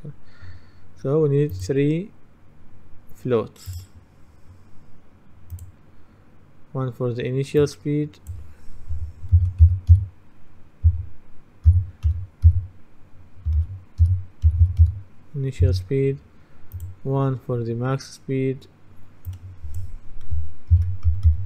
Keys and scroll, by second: 9.4-9.7 typing, 12.1-15.4 typing, 15.7 Return, 20.6-21.4 typing.